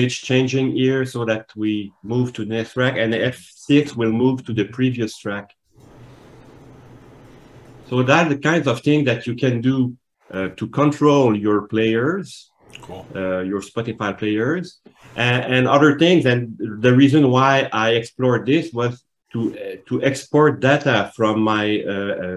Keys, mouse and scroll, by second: 4.4 F6, 8.5 click.